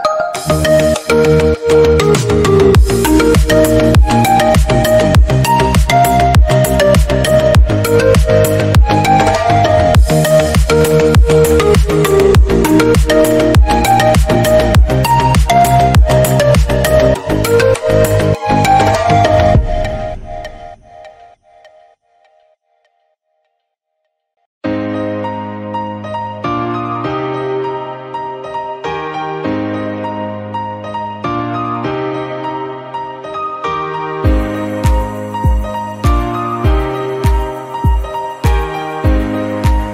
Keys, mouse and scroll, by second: 1.0-1.8 scroll up 2, 2.0 ctrl+r, 3.1 Tab, 3.2 scroll down 2, 3.4-4.1 middle drag, 4.1 scroll up 1, 4.4 Tab, 4.5-5.2 scroll down 1, 5.3 ctrl+z, 5.5 ctrl+z, 5.7 ctrl+z, 6.5-8.0 middle drag, 8.0-8.8 drag, 8.8 middle click, 9.4 s, 11.0 ctrl+r, 11.7 Tab, 11.8 scroll down 5, 12.0-13.1 middle drag, 13.1-13.8 scroll up 2, 13.4 middle click, 13.8-14.1 shift+middle drag, 14.1 Tab, 14.7 click, 15.1 3, 15.2 click, 15.5-16.8 shift+drag, 16.8 Tab, 17.0-17.6 scroll down 8, 17.6 middle click, 17.8-18.1 scroll up 1, 18.2-18.6 shift+middle drag, 18.6-19.3 scroll up 1, 19.3 Tab, 20.8-22.0 middle drag, 22.1 Tab, 22.3 scroll down 5, 22.5 click, 22.6-23.7 middle drag, 23.7 scroll up 1, 23.9-24.6 middle drag, 24.6 click, 24.9 Tab, 25.3 shift+middle click, 25.9 2, 26.3 alt+click, 26.8 g, 28.4 ctrl+r, 29.3 Tab, 29.4 scroll down 3, 29.6-30.0 middle drag, 30.0 scroll up 2, 30.2 shift+middle click, 30.7 ctrl+z, 30.9 ctrl+z, 32.0 g, 34.5-35.7 middle drag, 35.8 Tab, 36.3 scroll down 2, 36.5-37.1 middle drag, 37.1 scroll up 1, 37.2 middle drag, 37.4 Tab, 37.6 middle click, 38.7 shift+click, 39.3 middle click, 39.8 shift+click.